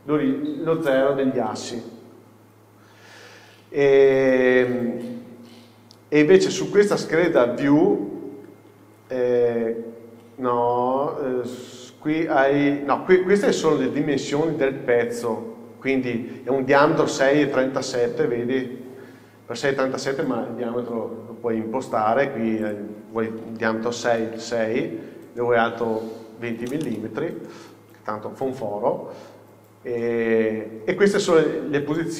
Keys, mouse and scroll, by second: 7.3 click, 8.7 scroll down 1, 9.5 scroll up 1, 11.6 click, 22.7-29.3 drag, 27.1 KP_Enter, 29.9-32.1 drag.